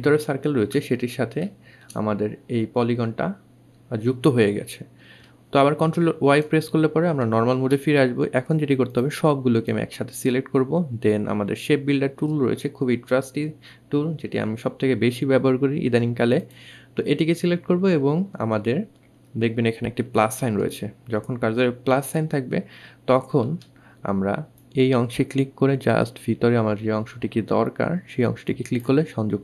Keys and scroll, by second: 3.9 ctrl+alt+y.